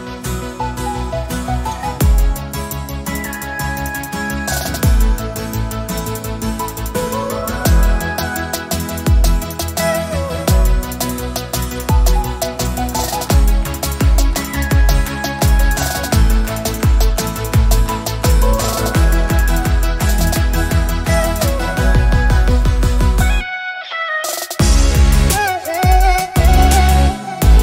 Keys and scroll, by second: 1.4 ctrl+z, 3.9 alt+space, 4.8 alt+space, 7.6 ctrl+Return, 11.5 shift+F6, 15.5 ctrl+j, 21.9 alt+BackSpace.